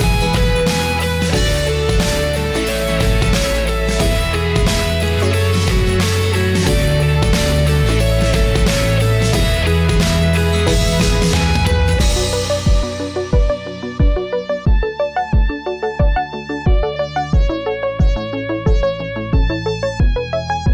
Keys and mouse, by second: 2.0-2.6 shift+middle drag, 4.3 shift+d, 5.9-16.5 drag, 9.2 KP_1, 10.5 BackSpace, 16.1 KP_1, 16.4 KP_3, 17.6 KP_1, 19.8-20.7 middle drag.